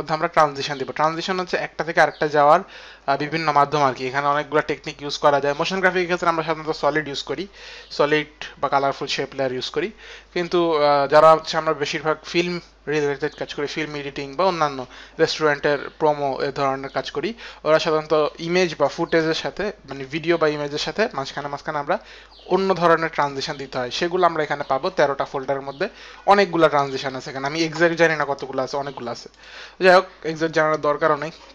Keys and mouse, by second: 29.1 click.